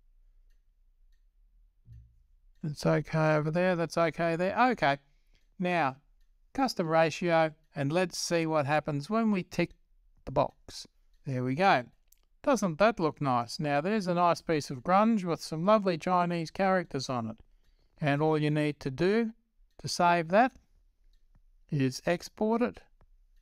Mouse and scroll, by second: 10.3-21.4 drag.